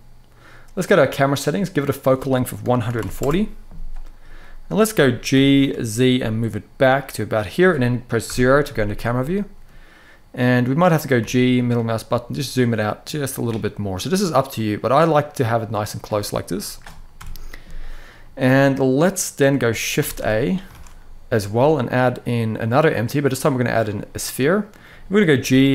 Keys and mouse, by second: 1.6-2.9 drag, 4.3 middle click, 5.0 g, 5.3 y, 8.0 KP_0, 10.9 g, 11.3 middle click, 20.5 shift+a, 23.9-24.5 middle drag, 25.0 g, 25.2 y.